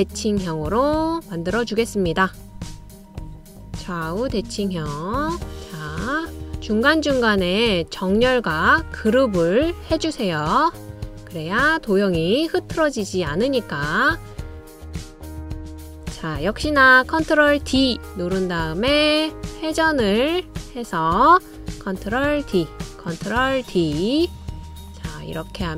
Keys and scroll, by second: 18.8 super+d, 23.9 super+d, 25.0 super+d.